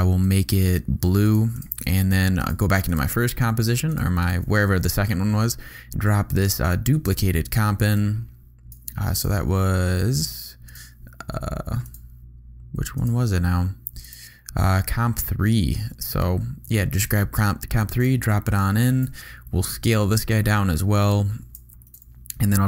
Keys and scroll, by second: 19.0 s, 21.7 v.